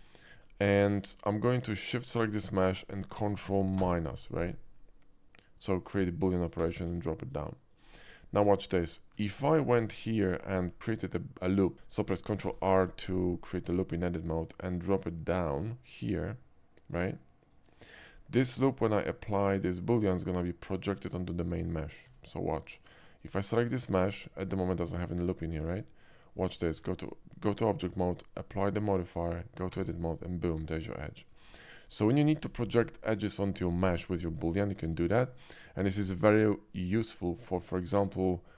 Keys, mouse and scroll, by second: 0.0 shift+middle drag, 0.3 shift+middle click, 0.8 shift+middle click, 1.7 shift+click, 3.8 ctrl+KP_Subtract, 5.3 click, 5.7 middle click, 6.5 g, 6.9 z, 7.7 click, 7.9 middle click, 8.2 middle click, 8.4 middle click, 9.1 Tab, 9.7 middle click, 11.7 ctrl+r, 12.5 ctrl+r, 14.3 click, 17.4 click, 22.2 Tab, 23.1 Tab, 23.1 click, 28.5 click, 29.1 click, 29.4 Tab, 30.1 middle click, 30.7 click, 31.8 alt+click.